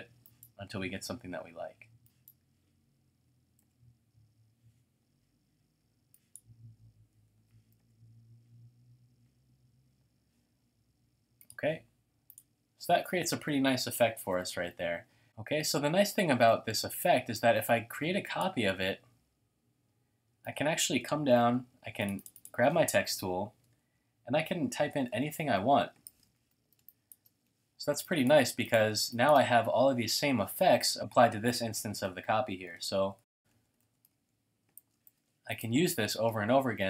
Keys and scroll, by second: 1.4-2.1 typing, 3.6 Tab, 7.1-7.8 typing, 15.2 space, 21.4 typing, 23.8-26.8 typing, 29.0 typing, 30.8-31.6 typing, 32.6-35.7 typing, 34.8 shift+super+a.